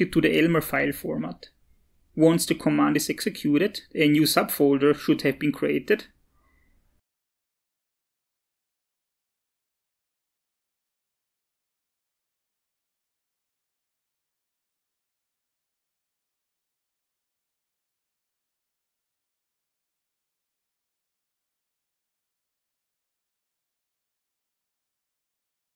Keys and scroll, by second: 3.4 Return.